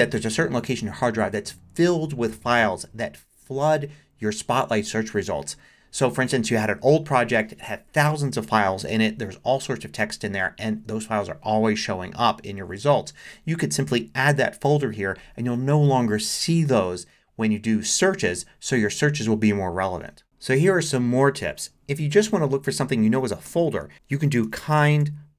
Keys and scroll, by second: 20.2 alt+super+2, 23.9-25.3 typing.